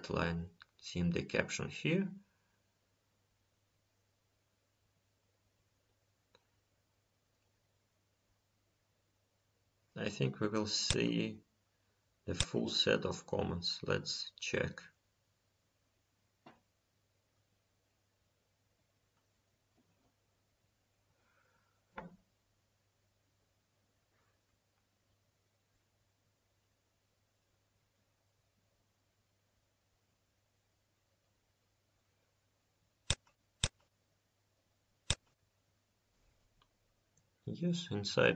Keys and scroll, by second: 7.8 ctrl+s, 22.4 F5, 33.1 F5, 37.2 F5.